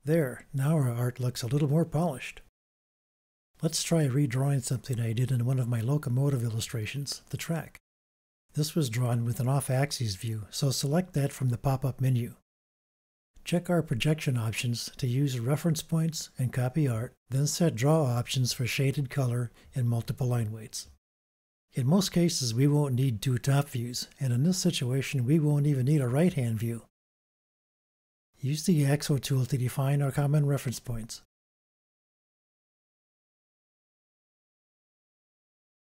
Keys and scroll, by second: 23.2 BackSpace, 25.0 BackSpace.